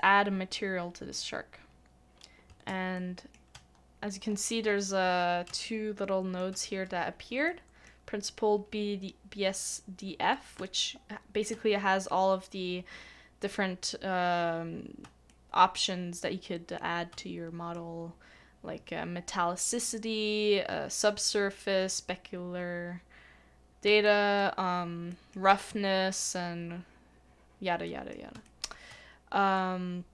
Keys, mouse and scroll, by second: 2.6 middle click, 2.9 shift+middle click, 3.7 scroll up 1, 4.2 scroll down 1, 4.3-4.7 scroll up 1, 5.0 scroll down 1, 5.6 shift+middle click, 7.5 middle click, 10.5 middle click, 10.6 shift+middle click, 15.3 shift+middle click, 17.2 shift+middle click, 23.8 middle click, 24.0 shift+middle click, 25.1 shift+middle click, 27.8 shift+middle click, 28.4 shift+middle click.